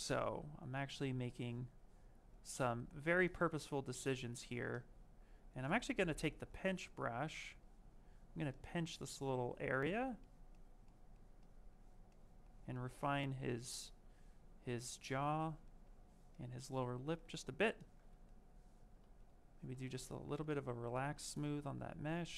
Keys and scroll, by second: 5.5 b, 5.9 p.